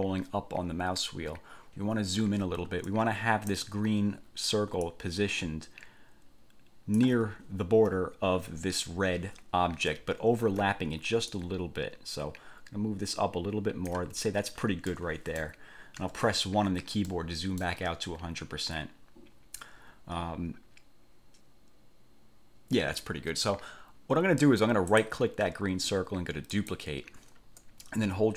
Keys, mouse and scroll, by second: 0.1-0.6 ctrl+scroll up 2, 0.7 ctrl+scroll up 2, 1.9 ctrl+scroll up 2, 3.1 ctrl+click, 5.1 ctrl+click, 7.6-8.0 ctrl+scroll up 2, 10.3-10.7 ctrl+scroll up 2, 11.5 ctrl+click, 15.1 click, 16.2 1, 17.3 click, 25.1 click, 26.7 click.